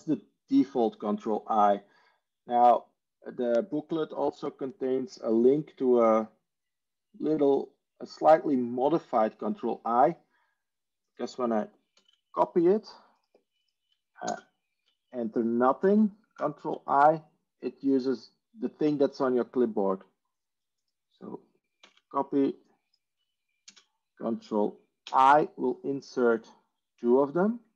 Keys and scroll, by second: 11.8 ctrl+c, 14.2 ctrl+space, 16.2 ctrl+i, 21.6 ctrl+c, 23.5 ctrl+space, 25.0 ctrl+i.